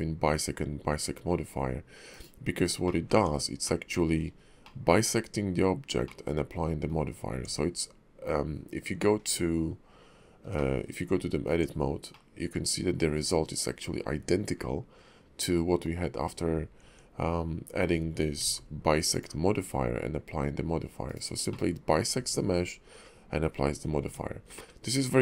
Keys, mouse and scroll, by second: 2.8 middle click, 3.1 Tab, 3.6 middle click, 4.2 scroll down 1, 4.3-4.6 scroll up 2, 4.6 middle click, 6.0 middle click, 7.3 Tab, 9.2 click, 10.6 middle click, 11.1 Tab, 12.1 middle click, 16.8 Tab, 18.4 alt+x, 19.1 click, 21.7 middle click, 24.0 Tab, 24.6 middle click.